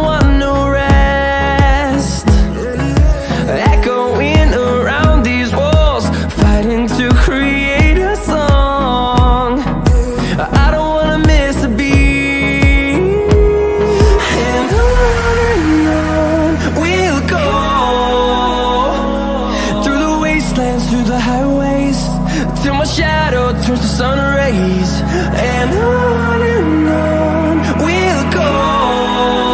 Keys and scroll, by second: 8.5 ctrl+d, 23.5 ctrl+d.